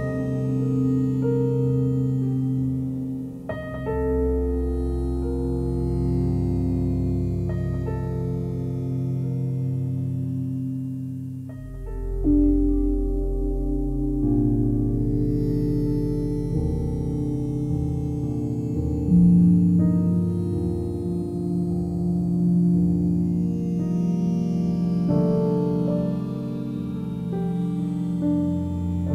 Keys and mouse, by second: 0.7 g, 1.1 x, 2.3 Escape, 3.6 click, 4.6 g, 5.0 x, 6.1-7.3 drag, 6.9 typing, 7.6-8.8 alt+drag, 10.7 typing, 12.0-13.0 typing, 14.1-15.3 typing, 15.8 click, 16.9-17.2 typing, 18.3 click, 19.0 alt+click, 20.1-22.0 alt+drag, 22.8 click, 23.4 click, 24.2 alt+click, 25.5 ctrl+alt+click, 25.8 alt+shift+click, 26.7 1, 27.7 click, 28.2-29.1 alt+drag.